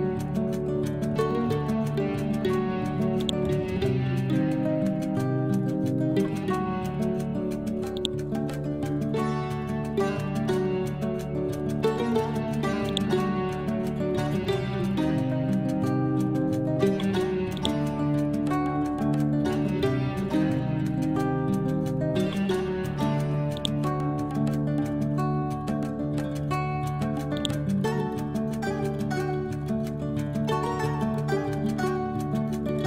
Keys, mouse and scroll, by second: 1.3-1.9 scroll down 1, 2.1 scroll up 1, 3.2-5.6 ctrl+drag, 5.6 scroll down 1, 8.0-10.5 drag, 10.5 scroll down 1, 12.3-12.9 scroll up 1, 12.9 ctrl+click, 14.0-14.7 scroll down 1, 14.7 scroll up 1, 15.9 scroll down 1, 16.4 scroll up 1, 17.6-20.5 ctrl+drag, 20.5-20.8 scroll down 1, 22.8-23.5 scroll up 1, 23.6 ctrl+click, 24.5 scroll down 1, 26.4-27.3 scroll up 1, 27.4-29.5 ctrl+drag, 29.5-30.2 scroll down 1, 32.2 scroll up 1, 32.7 ctrl+z.